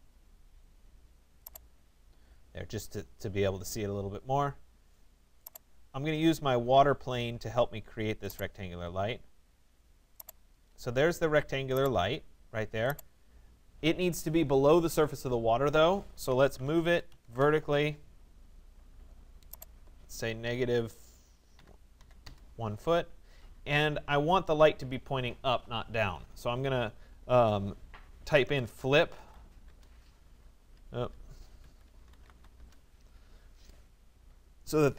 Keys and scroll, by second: 16.4 Return, 20.5 -, 21.6 1, 22.3 Return.